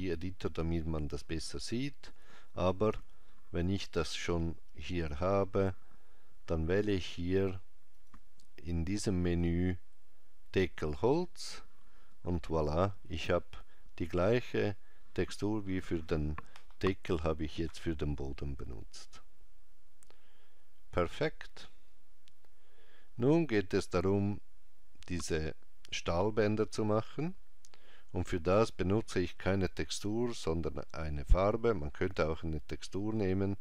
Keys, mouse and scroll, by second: 4.1 click, 8.0 click.